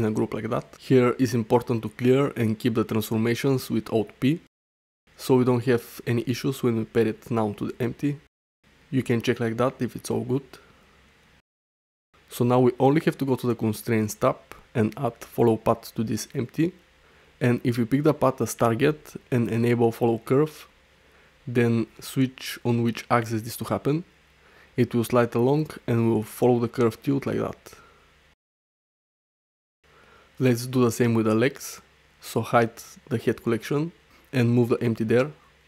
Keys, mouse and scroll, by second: 1.3 alt+p, 5.2 ctrl+p, 9.3 ctrl+p, 9.7 g, 11.4 g, 13.9 click, 15.2-16.6 drag, 21.1 click, 23.3 click, 24.3 ctrl+z, 24.3 Tab, 24.7-28.1 drag, 28.8 ctrl+z, 29.1 ctrl+z, 29.3 ctrl+z, 29.4 ctrl+z, 29.6 ctrl+z, 32.9 click, 34.5 m.